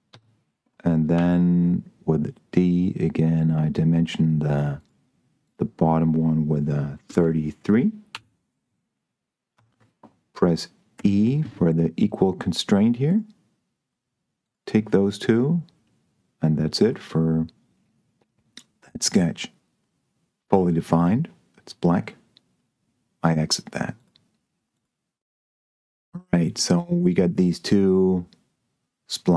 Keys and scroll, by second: 0.4 Escape, 1.1 d, 7.3 3, 8.1 Return, 9.8 Escape, 11.2 e.